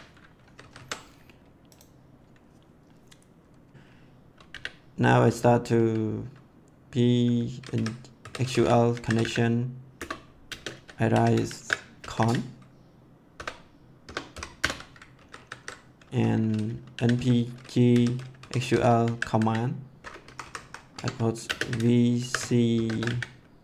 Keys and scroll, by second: 0.3 ctrl+s, 4.5 n, 5.3 p, 7.5-12.6 typing, 9.9 Return, 13.7 =, 14.0 BackSpace, 14.3 ;, 14.5 Return, 15.1 ctrl+s, 16.7-19.8 typing, 20.2 Up, 20.9 Tab, 21.4-23.6 typing.